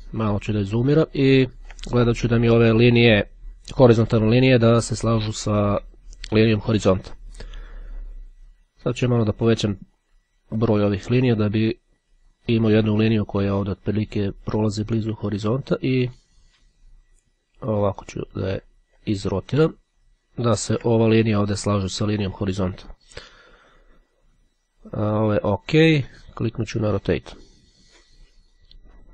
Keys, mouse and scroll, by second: 9.4-11.4 drag, 12.5-18.7 drag, 19.2-19.8 ctrl+scroll down 2, 19.8-20.2 ctrl+scroll down 1, 20.4-20.9 ctrl+scroll down 2, 22.4-23.5 ctrl+scroll up 2, 26.3 click, 27.0 click.